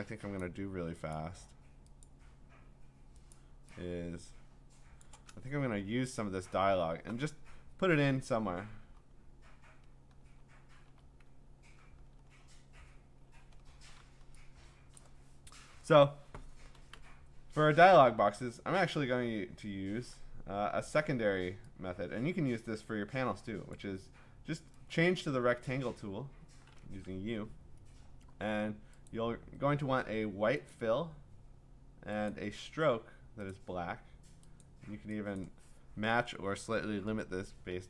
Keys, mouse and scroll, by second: 0.4 click, 1.1 click, 2.0 click, 3.3 click, 5.0 click, 5.4-8.4 ctrl+scroll, 11.7-12.2 scroll, 12.2-13.2 scroll, 13.3-13.7 scroll, 15.0 click, 16.9 m, 19.0 m, 23.7 click, 25.7 click, 27.0 Escape, 29.1 click, 30.7 click, 32.3 click, 35.4 click, 37.7 5.